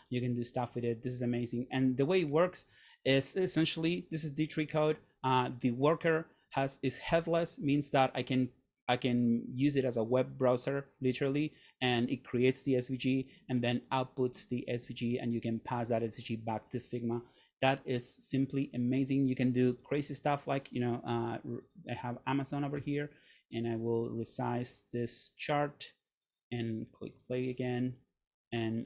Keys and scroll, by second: 21.2 Delete.